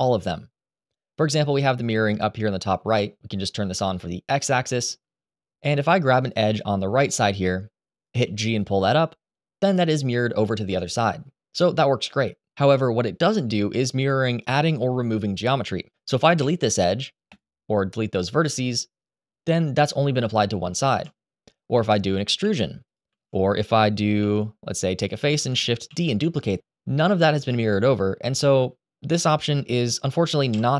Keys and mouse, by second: 6.8 middle click, 7.9 g, 10.4 Escape, 16.1 Delete, 17.9-19.1 middle drag, 20.6 ctrl+z, 22.2 e, 22.6 click, 22.9 ctrl+z, 23.8 3, 23.9 3, 24.7 click, 25.6 shift+d, 26.1 click, 30.2 Delete.